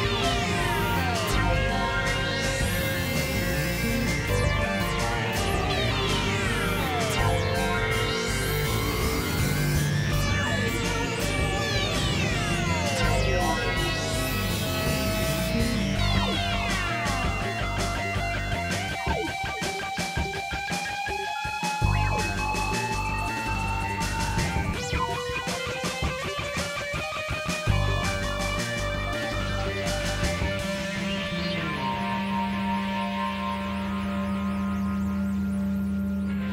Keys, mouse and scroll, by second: 1.2 click, 2.1 click, 2.8 click, 3.7 middle click, 4.7 KP_Divide, 5.6 click, 6.2 right click, 6.5 KP_Divide, 7.5 click, 7.8 click, 8.2 middle click, 8.6 KP_3, 9.0 KP_1, 9.2 middle click, 9.8 x, 10.0-11.7 drag, 12.1 click, 13.4 ctrl+z, 13.7 x, 14.0 click, 14.8 click, 16.4 ctrl+z, 17.0 click, 17.6 click, 18.5 click, 19.4 click, 21.3 click, 22.8 click, 23.8 click, 24.7 middle click, 25.5 KP_Divide, 26.2 click, 26.8 right click, 28.4 KP_Divide, 29.8 middle click, 30.7 Tab, 31.4 click, 31.8 KP_7, 32.2 middle click, 32.8 KP_Divide, 33.5 right click, 33.8 KP_Divide, 34.2 middle click, 34.7 Tab, 35.2 KP_1, 36.2 click.